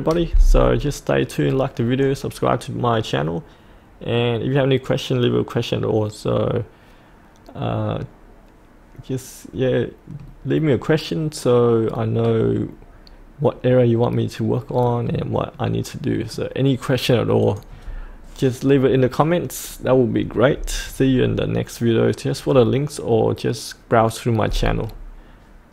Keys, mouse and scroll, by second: 15.6-17.3 middle drag, 17.4 click.